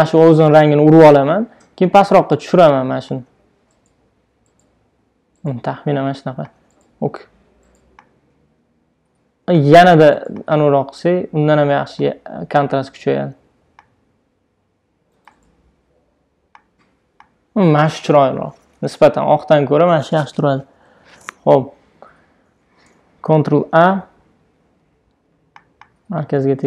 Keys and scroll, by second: 19.2 shift+Down, 20.1 shift+Up, 23.3 super+a.